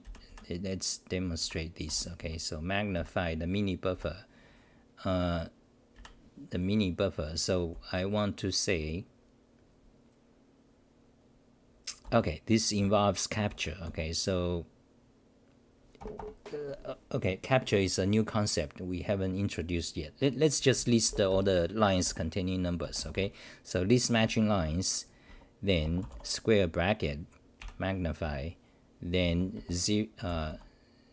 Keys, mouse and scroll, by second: 0.0 ctrl+=, 0.3 ctrl+=, 1.4 ctrl+-, 1.9 Home, 2.2 w, 2.9 ctrl+=, 5.9 ctrl+-, 12.0 u, 16.0 ctrl+g, 16.1 ctrl+g, 20.8-21.8 typing, 25.3 Home, 26.1 space, 27.6 ctrl+=, 29.6-31.0 typing.